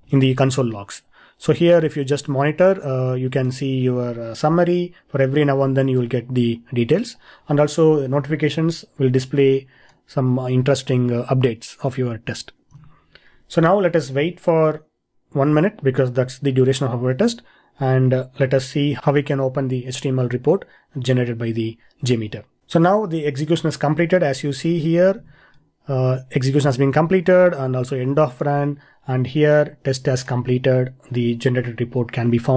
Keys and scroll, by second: 0.0 ctrl+e, 24.2 ctrl+e.